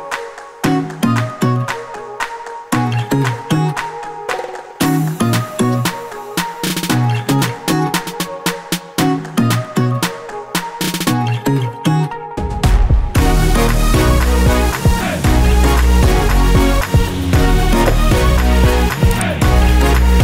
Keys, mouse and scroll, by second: 2.2 click, 3.4 click, 5.3 3, 7.7 click, 9.0 click, 9.9 5, 11.9 click, 12.6 2, 15.8 click, 16.8 3, 20.0 click.